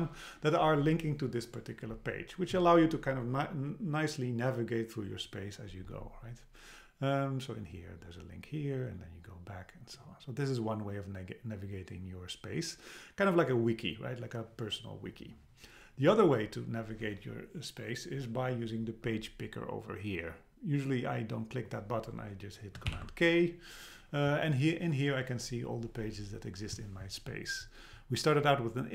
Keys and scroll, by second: 22.9 super+k.